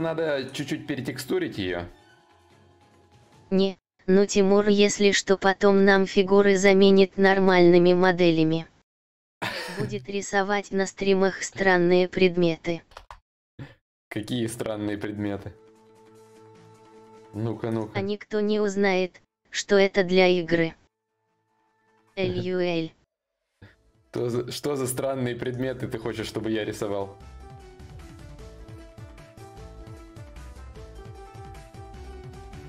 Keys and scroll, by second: 12.5 ctrl+s, 19.9 ctrl+s.